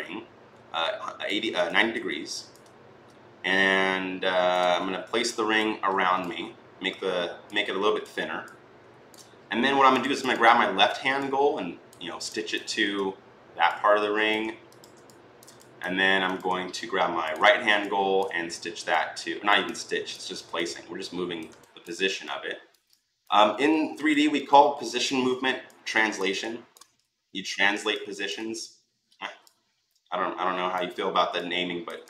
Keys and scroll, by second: 1.5 ctrl+z, 4.6 e.